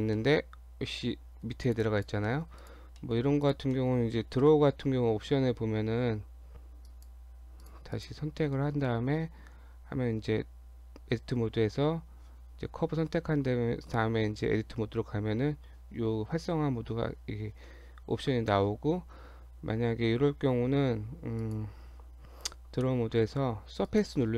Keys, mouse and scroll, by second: 0.2 middle click, 1.7 click, 1.8 click, 2.3 middle click, 2.6 click, 3.0 middle click, 3.5 click, 3.7 middle click, 4.4 KP_7, 6.3 Tab, 6.9 click, 7.3 Tab, 7.6 click, 7.9 click, 8.7 Tab, 19.5-20.5 scroll down 5, 20.4-20.8 scroll up 5, 21.4 click, 22.2-22.9 scroll down 2, 23.8 click.